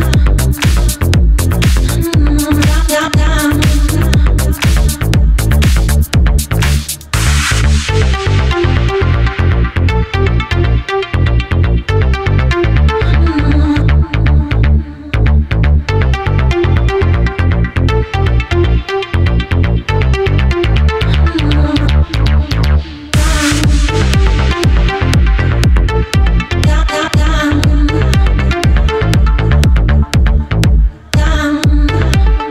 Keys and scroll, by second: 0.2 Down, 6.2 super+s, 9.4 Left, 10.6 super+s, 21.0 super+BackSpace, 22.1 super+BackSpace, 24.1 super+c, 24.7 super+v, 28.8 BackSpace.